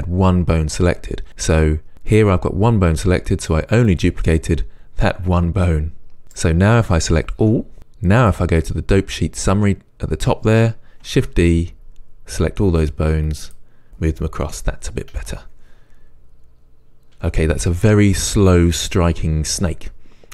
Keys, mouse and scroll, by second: 1.3 right click, 3.9-8.2 right drag, 7.4 a, 8.2 click, 11.2 shift+d, 13.5 click, 15.2 space.